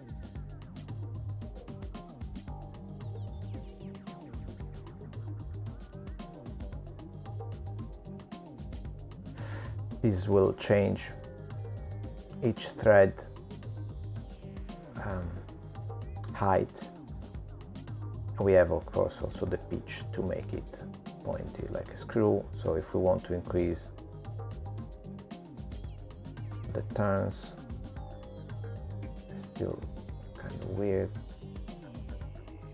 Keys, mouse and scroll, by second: 3.2 click, 5.3 middle click, 8.3 click, 21.0 click, 24.9 middle click, 27.5 click, 30.8 middle click, 32.6 scroll down 4.